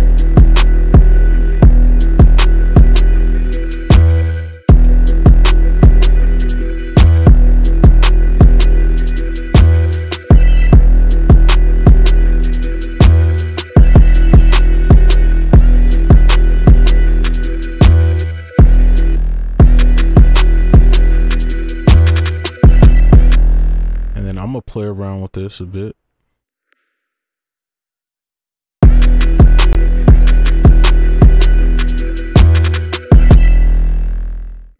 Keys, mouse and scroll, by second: 1.3 space, 1.6 space, 2.5 double click, 4.0 space, 4.7 space, 7.0 space, 7.2 space, 9.4 right click, 10.3 space, 10.7 space, 15.2 space, 15.6 space, 16.8 double click, 18.2 space, 18.6 space, 19.6 space, 19.7 double click, 22.9 space, 23.1 space, 23.3 space, 27.8 double click, 28.8 space, 29.8 space, 31.5 space, 33.3 space, 34.3 right click.